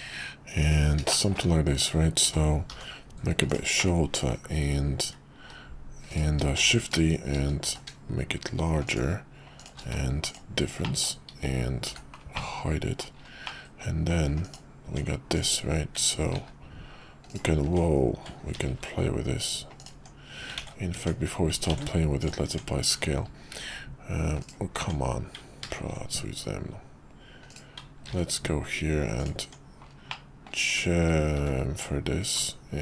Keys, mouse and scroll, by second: 1.2 middle click, 2.2 s, 3.8-4.3 middle drag, 5.4 s, 6.6 shift+d, 7.6 s, 9.8 q, 10.8 middle click, 11.9 h, 12.4-13.1 middle drag, 13.5 middle click, 14.4 click, 14.8 Tab, 16.3 ctrl+b, 17.6 Tab, 18.6 ctrl+b, 19.9 Tab, 20.6 ctrl+z, 20.9 Tab, 21.7 ctrl+a, 22.5 Tab, 23.5 ctrl+b, 24.8 Tab, 25.7 ctrl+b, 29.4 Tab, 30.1-30.4 middle drag, 30.7 `, 31.4 `.